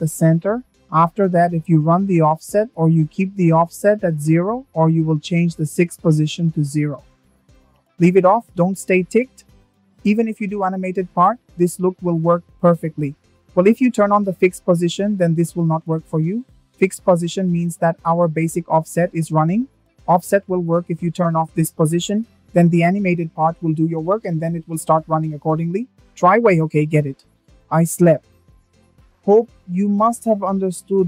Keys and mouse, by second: 1.6-3.2 drag, 3.5-6.8 drag, 10.0 click, 10.8 space, 14.5 space, 15.0 space, 16.0 click, 17.6-19.2 drag, 20.5 click, 21.8 space, 26.6 space, 27.9 click.